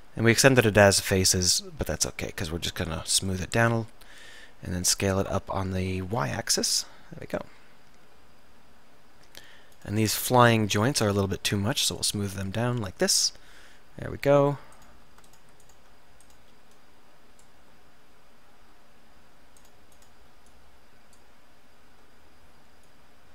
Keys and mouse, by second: 5.3 s, 8.1-9.4 middle drag, 9.9-13.8 drag, 12.2-13.4 right drag, 13.8-15.3 middle drag, 18.1-20.7 middle drag, 22.4 middle click.